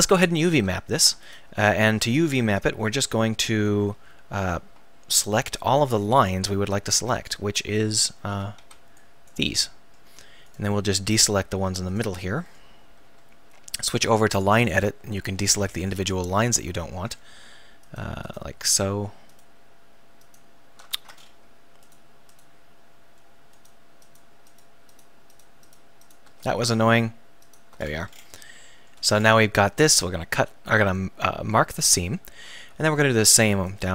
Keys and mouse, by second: 1.3-2.6 right drag, 2.6 KP_1, 3.9 z, 7.0 b, 8.4 a, 8.7 b, 11.5 right click, 13.8-16.4 drag, 16.4 middle click, 16.4 right click, 21.0 ctrl+z, 21.4-22.9 right drag, 24.2-27.9 right drag, 27.9-29.8 middle drag, 31.6-32.7 drag.